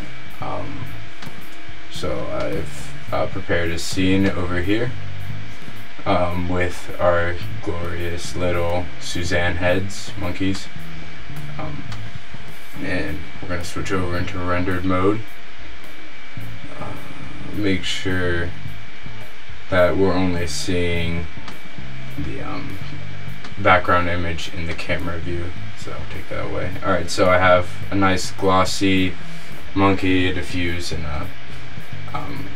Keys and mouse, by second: 4.3 middle click, 22.0-23.5 drag, 23.7-25.5 drag.